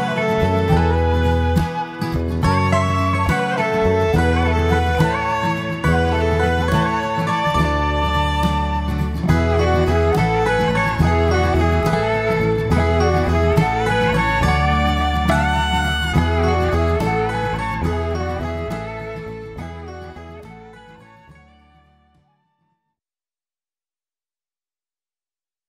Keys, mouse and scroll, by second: 0.9 click, 1.3 click, 2.1-2.5 scroll down 3, 2.6 middle click, 3.4-3.9 scroll up 2, 3.9 middle click, 5.2 shift+middle click, 5.8 middle click.